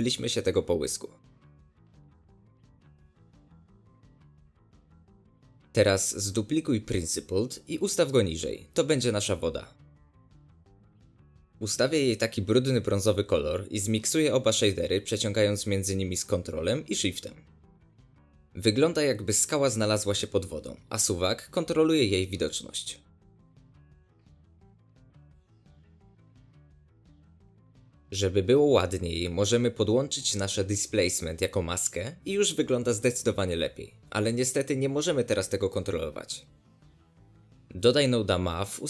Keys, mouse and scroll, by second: 1.2-3.8 shift+drag, 5.0 ctrl+shift+click, 6.0 ctrl+shift+click, 6.4 ctrl+shift+click, 8.5 click, 8.7 shift+d, 11.3 ctrl+shift+click, 14.0-15.1 drag, 15.1-16.2 middle drag, 16.2 click, 17.3 scroll down 2, 17.4-19.3 middle drag, 19.3-20.2 ctrl+shift+right drag, 20.2 scroll up 2, 20.4-23.8 middle drag, 23.8-26.5 drag, 29.7 click, 32.8 ctrl+shift+click, 34.1 ctrl+shift+click, 34.9 scroll down 1, 35.0-38.8 middle drag.